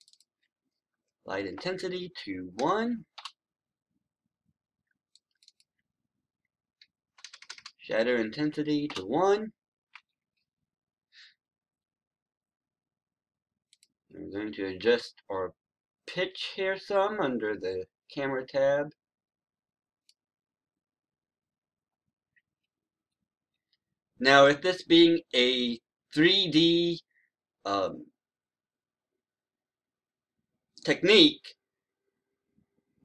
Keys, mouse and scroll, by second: 1.3 KP_1, 2.5 BackSpace, 5.0 click, 7.0 BackSpace, 8.3 KP_1, 13.6-33.0 drag.